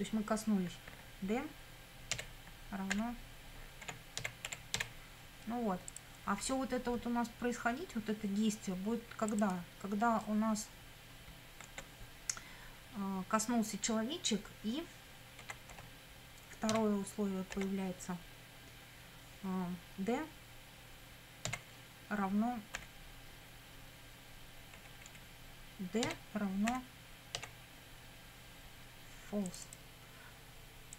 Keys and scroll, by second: 2.1-5.3 typing, 11.7 space, 15.4 a, 15.7 n, 16.7 d, 17.5 space, 21.5 f, 22.8 =, 24.8 BackSpace, 26.0 d, 26.7 =, 27.4 f.